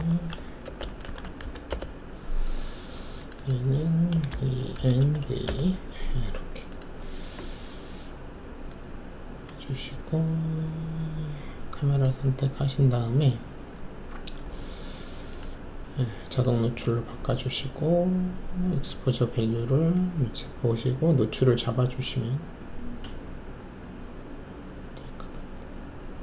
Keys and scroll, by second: 0.6-1.7 typing, 1.7 Return, 4.3 shift+e, 4.7 shift+n, 5.0 shift+v, 5.4 Return.